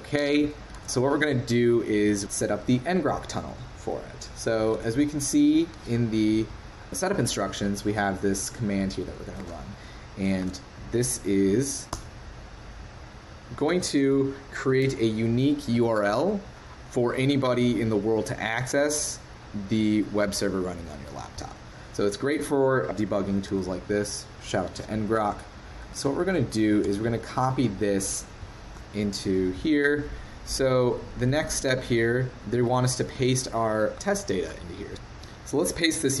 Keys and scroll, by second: 0.8 super+w, 0.8 super+Tab, 4.7 super+Tab, 9.4 super+Tab, 10.4 super+v, 26.2 super+c, 26.8 super+w.